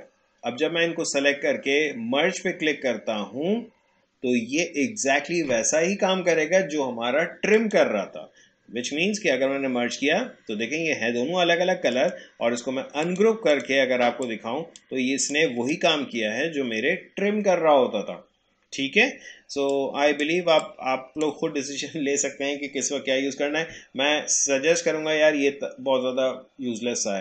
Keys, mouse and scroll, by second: 7.6 click, 11.9 right click, 13.0-18.3 drag, 19.6-23.6 drag.